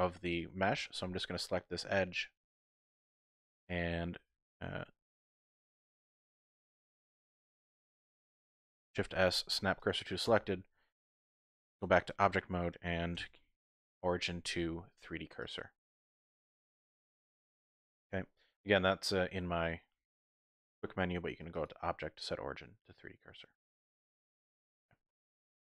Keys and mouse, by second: 0.3 alt+click, 0.4 typing, 1.4-2.7 middle drag, 3.2 middle click, 8.9 shift+s, 10.3 Tab, 13.2 q, 16.0 `, 19.3 middle click, 19.3-20.0 typing, 21.5-24.7 drag, 25.2 Escape.